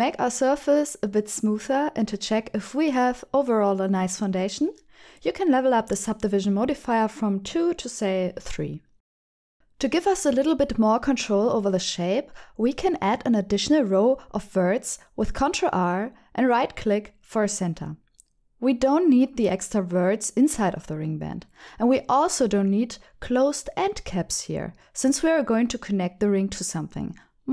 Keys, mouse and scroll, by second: 0.6 Tab, 0.8 middle click, 1.6 Tab, 1.9-5.2 middle drag, 5.6 middle click, 6.9 Tab, 7.4 middle click, 7.7 Tab, 8.0 middle click, 9.9 click, 10.9 Tab, 11.2 click, 12.5 click, 12.7-14.7 middle drag, 12.8 Tab, 15.5 ctrl+r, 17.9 right click, 18.2 middle click, 19.9 alt+z, 20.2 middle click, 21.5 3, 22.0 click, 22.5 shift+click.